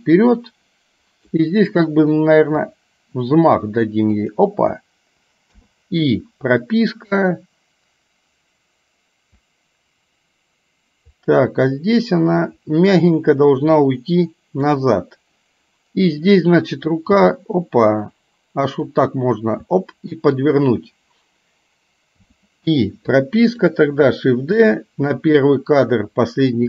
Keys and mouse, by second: 2.6 r, 5.6 i, 6.8-14.8 drag, 17.1 g, 19.7 r, 22.2 i, 23.1 click, 24.6 shift+d.